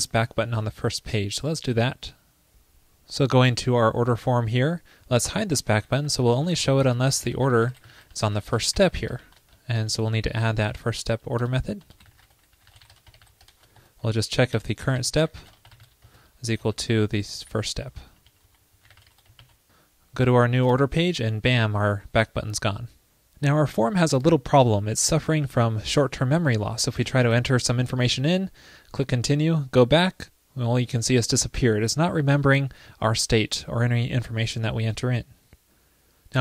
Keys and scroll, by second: 10.1 super+s, 10.6 alt+super+Right, 19.5 super+s.